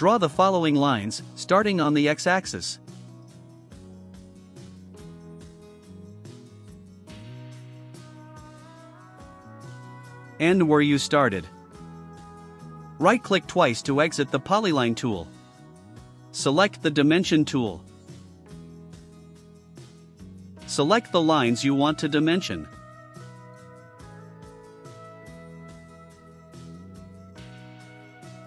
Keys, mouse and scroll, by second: 1.4 click, 2.7 click, 4.2 click, 5.6 click, 7.4 click, 8.9 click, 11.1 click, 12.6 click, 13.2 right click, 14.4 right click, 21.8 click, 22.6 1, 23.0 0, 23.3 Return, 24.2 click, 25.2 click, 26.4 5, 26.8 Return, 28.0 click.